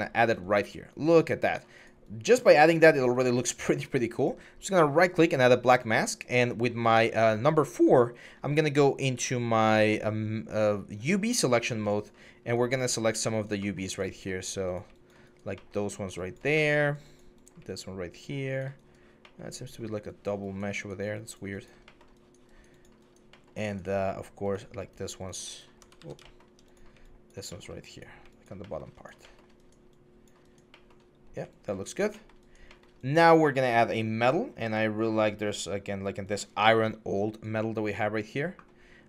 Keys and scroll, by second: 5.7 4, 25.7 ctrl+z, 31.0 1.